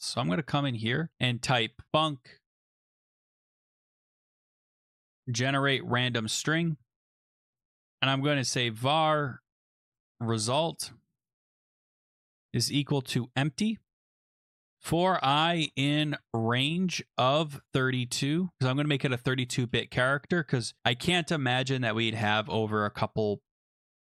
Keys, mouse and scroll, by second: 0.5 Return, 0.7 Return, 1.3-19.4 typing, 14.1 Right, 14.3 Return, 19.6 Return.